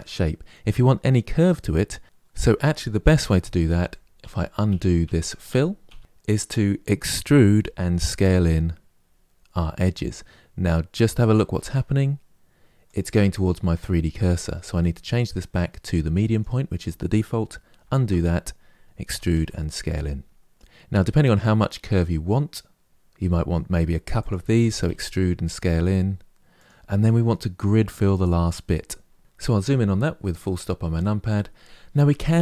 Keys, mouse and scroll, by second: 1.6 middle click, 3.5 ctrl+z, 3.9 ctrl+z, 4.4 ctrl+z, 4.8 ctrl+z, 5.2 ctrl+z, 5.6 ctrl+z, 5.9 ctrl+z, 7.0 e, 14.7-17.5 drag, 17.5 ctrl+z, 18.8 e, 22.9 s, 24.3 e, 29.3 KP_Decimal, 29.9-31.6 middle drag.